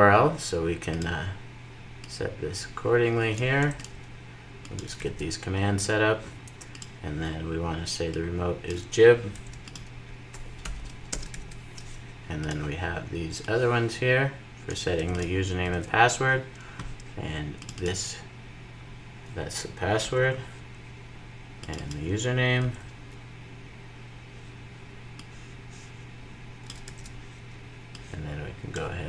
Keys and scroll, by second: 4.9 super+v, 11.1 super+v, 15.4 super+v, 19.8 super+x, 21.1 super+v, 22.5 super+x, 26.6 super+v.